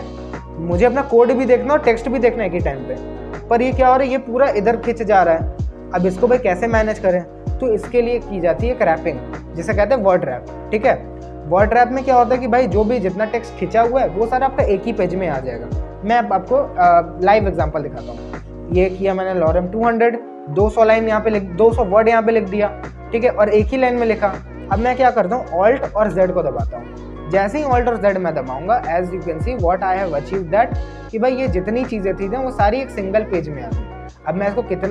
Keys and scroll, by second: 26.1 alt+z.